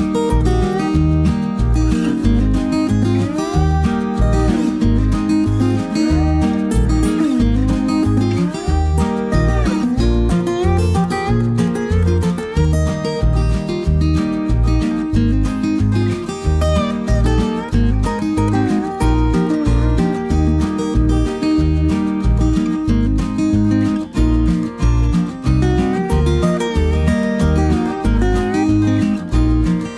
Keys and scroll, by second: 4.2 ctrl+d, 4.8 ctrl+-, 4.9 ctrl+-, 4.9 ctrl+-, 5.9 space, 18.5-19.4 typing.